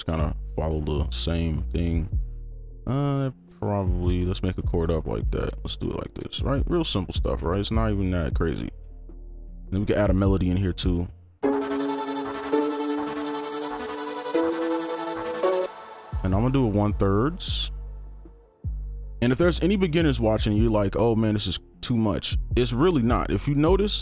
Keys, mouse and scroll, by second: 0.2 shift+click, 3.9 ctrl+click, 4.1 shift+click, 4.6 right click, 5.3 ctrl+click, 6.0 shift+click, 6.8 right click, 9.0 alt+click, 11.8 right click, 15.6 space, 17.5 right click, 18.6 alt+click.